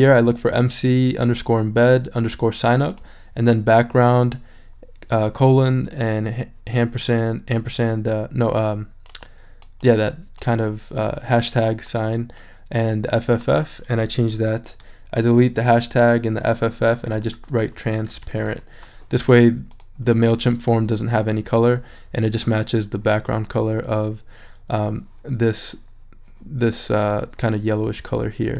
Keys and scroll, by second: 14.8 BackSpace, 16.8-18.9 typing.